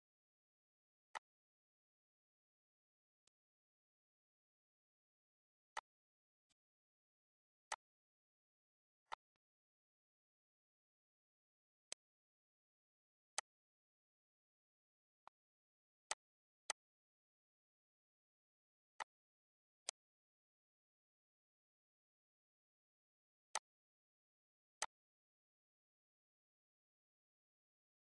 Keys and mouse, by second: 1.2 click, 1.6 click, 3.1 click, 5.5 click, 6.3 click, 7.5 click, 8.9 click, 11.0 ctrl+s, 11.8 click, 13.3 shift+click, 14.9 click, 15.6 click, 16.1 click, 16.9 shift+click, 17.3 click, 18.0 shift+click, 18.4 click, 18.8 click, 19.7 click, 20.1 ctrl+s, 20.8 click, 21.5 shift+click, 22.1 shift+click, 23.3 shift+click, 23.7 shift+click.